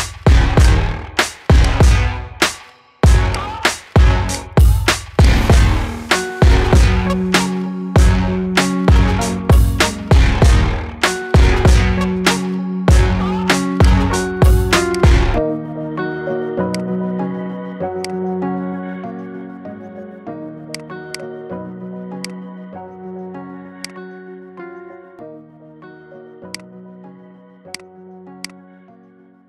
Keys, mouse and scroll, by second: 0.5 click, 1.5 click, 4.4-5.2 drag, 5.7-6.1 scroll down 2, 6.1-6.8 middle drag, 6.8-8.1 scroll up 3, 8.1-8.6 middle drag, 8.6-9.1 scroll down 4, 9.1-10.0 middle drag, 10.0-10.5 scroll up 3, 10.5-12.3 shift+middle drag, 12.3-12.7 scroll up 3, 12.7-13.7 middle drag, 13.7 click, 14.8-18.8 drag, 18.8-19.3 scroll up 3, 19.3-20.4 shift+middle drag, 20.4 click, 21.0 click, 23.8 drag, 24.6-25.4 scroll up 2, 25.4-26.5 shift+middle drag, 26.5 click, 27.6 click.